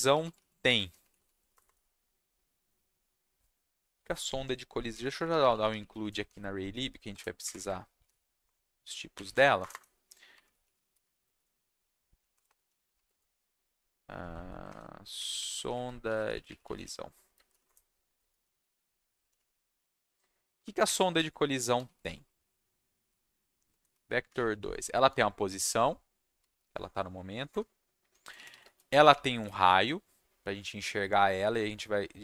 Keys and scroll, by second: 0.0-1.8 typing, 4.6-8.5 typing, 9.6 shift+Return, 10.1-25.2 typing, 17.6 Return, 18.0 Down, 20.8 Up, 21.1 Tab, 26.4 s, 27.5 Return, 28.1-29.9 typing.